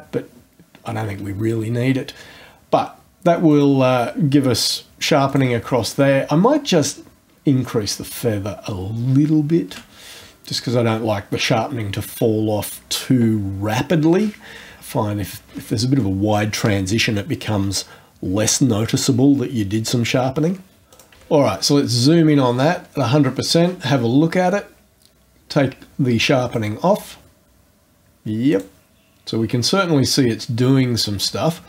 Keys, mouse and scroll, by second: 3.5 click, 5.3 click, 6.9-8.7 shift+scroll up 10, 20.9 click, 21.9-22.6 scroll up 3, 26.4 click, 28.5 click.